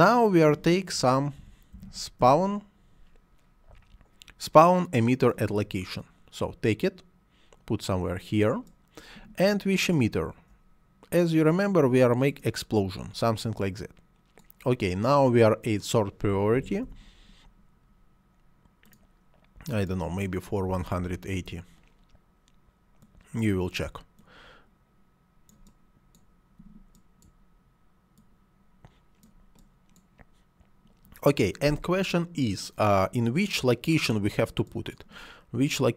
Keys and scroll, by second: 1.3 s, 1.6 p, 1.7 a, 2.0 w, 16.2 s, 16.4 o, 16.7 r, 20.5 1, 20.7 8, 21.2 Return.